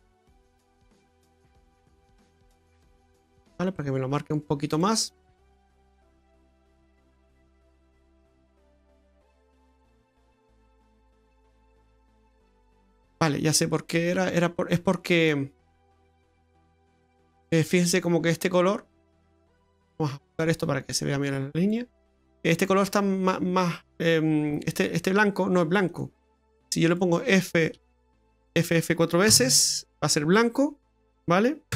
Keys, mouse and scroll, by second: 1.5 click, 5.2-5.9 scroll up 4, 5.9 middle click, 7.7 click, 10.2 click, 11.6 click, 13.2 click, 18.0 click, 20.2 click, 24.7 click, 25.9 click, 28.0 f, 28.1 f.